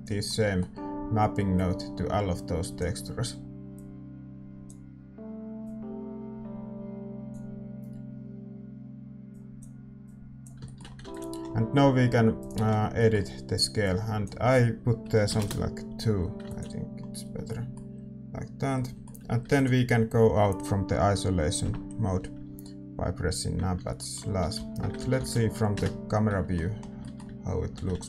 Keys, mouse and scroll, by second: 0.4-3.1 middle drag, 16.5 ctrl+s, 17.4-22.5 middle drag, 20.5 ctrl+s, 22.5 KP_Divide, 23.4-28.0 middle drag, 25.8 ctrl+s, 25.8 a, 25.8 KP_0.